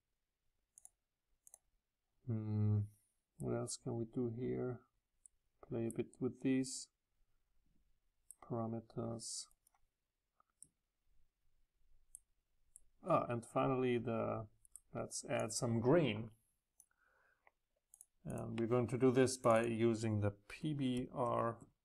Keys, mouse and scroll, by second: 4.2 right click, 4.7 right click, 7.6 right click, 7.7-9.6 middle drag, 10.6-13.8 middle drag, 15.6 click, 15.8 click, 16.0-21.6 drag.